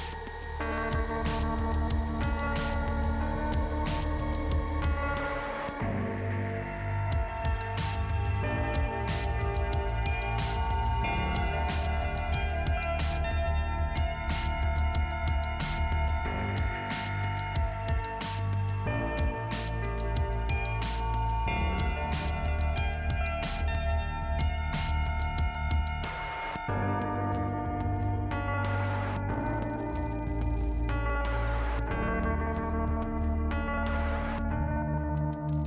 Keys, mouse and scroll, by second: 4.0 click, 5.4 click, 6.3 click, 9.2 k, 10.3 middle click, 11.0-11.7 scroll up 1, 12.0 click, 14.1 click, 16.8 click, 19.0 click, 19.1 click, 19.6-20.6 scroll down 2, 20.6 p, 20.9 scroll down 2, 23.8-24.9 scroll up 1, 24.9 scroll up 1, 25.7 click, 30.4 click, 31.0 ', 31.9 click, 33.0 click, 34.7 click.